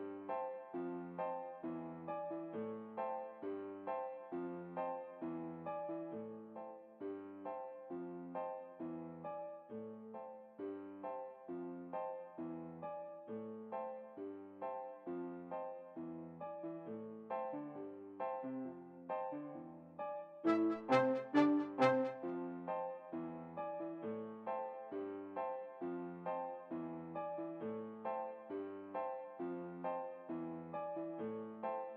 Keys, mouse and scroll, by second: 5.7 a, 5.9 middle click, 5.9 a, 6.4 a, 7.2 t, 14.7-17.1 drag, 18.5 middle click, 18.9 alt+a, 21.8 Escape, 23.7-25.6 drag, 25.0-26.5 middle drag, 28.0-29.5 right drag, 29.5-30.8 drag, 30.5-31.9 right drag, 31.0 a, 31.1 a.